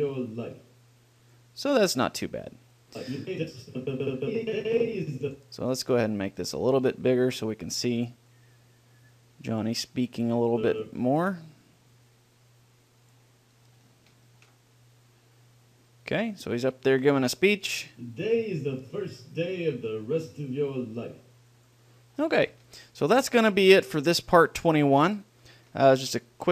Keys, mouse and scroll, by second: 1.5-3.1 drag, 6.7-10.3 drag, 10.8-14.0 drag, 14.1 click, 14.4-17.1 middle drag, 17.3-19.9 drag, 21.9-23.6 drag, 22.7 middle click, 23.0 middle click, 23.2 middle click, 23.6-26.5 middle drag.